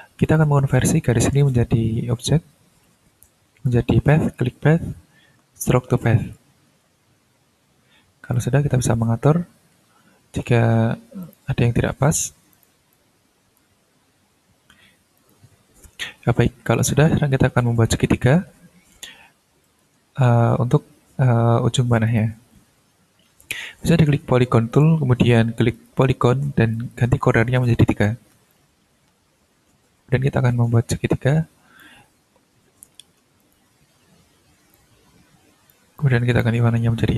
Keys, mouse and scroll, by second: 0.2 ctrl+click, 0.7-1.5 ctrl+scroll up 3, 4.3 click, 5.9 click, 7.2-8.1 ctrl+scroll up 2, 8.3 ctrl+click, 8.7-10.4 ctrl+scroll down 11, 10.6 ctrl+scroll up 2, 11.2 ctrl+click, 12.5 click, 12.9 ctrl+click, 13.9-14.8 ctrl+scroll down 2, 15.1 click, 15.9-16.7 ctrl+scroll down 2, 16.7 ctrl+click, 17.1 scroll up 2, 18.0 ctrl+s, 19.6 click, 22.0 click, 24.7 click, 25.7 click, 26.7 click, 27.9 ctrl+scroll up 2, 28.5-32.0 ctrl+drag, 33.4 click, 34.2-34.6 ctrl+scroll up 2, 34.7 ctrl+click, 35.9 click.